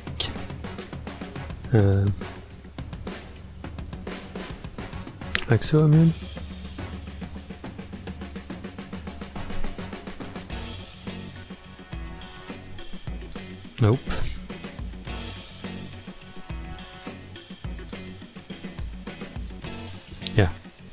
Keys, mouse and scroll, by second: 5.3-6.4 middle drag, 6.4-6.9 scroll up 2, 7.7 middle click, 8.6 click, 10.3 KP_1, 11.1 ctrl+KP_3, 14.5 click, 16.2-19.2 shift+drag, 19.4 click.